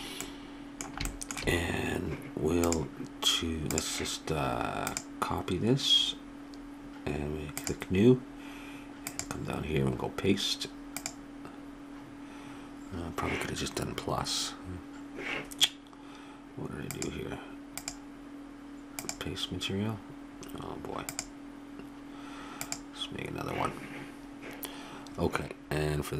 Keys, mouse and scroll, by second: 2.6-6.7 drag, 7.5-10.8 drag, 16.9-24.5 drag.